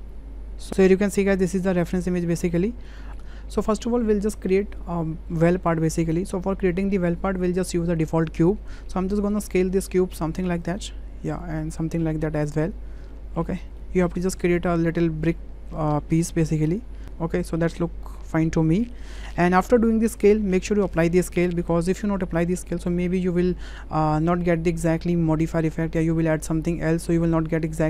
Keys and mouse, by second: 0.7 shift+drag, 2.5 shift+click, 9.0 middle drag, 9.9 shift+middle drag, 10.6 click, 12.0-13.6 drag, 13.8 middle drag, 14.4 shift+middle click, 15.4-16.4 drag, 16.6-17.5 drag, 17.7-18.9 drag, 19.2 shift+click.